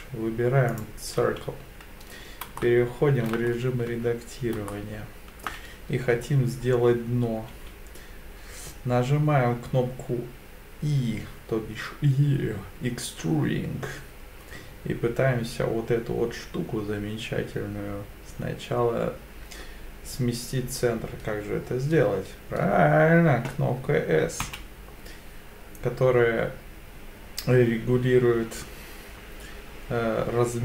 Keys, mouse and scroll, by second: 2.6-3.3 shift+middle drag, 3.5-3.9 scroll up 2, 3.9 Tab, 4.7 shift+middle click, 7.5 e, 24.4 s.